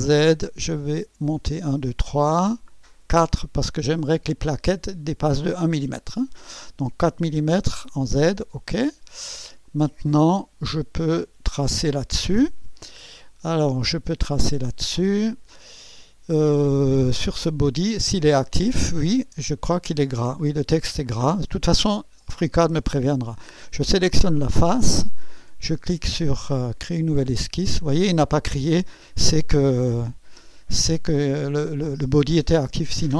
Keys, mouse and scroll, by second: 0.1 click, 0.9-1.6 scroll up 4, 2.3 scroll up 2, 3.1 scroll up 2, 4.0-4.4 scroll up 2, 4.6 right click, 8.2 click, 8.8-9.2 scroll down 1, 9.7 click, 10.5 click, 13.0 click, 14.3-15.8 drag, 17.4 click, 23.8 click, 27.1 click, 32.8 scroll up 2.